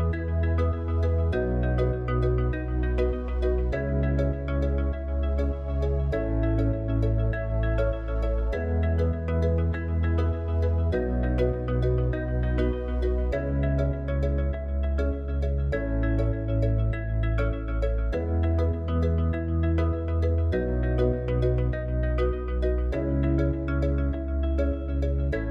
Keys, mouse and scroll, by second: 1.7 click, 4.0 click, 7.2 click, 9.7 click, 11.8 click, 20.5 click.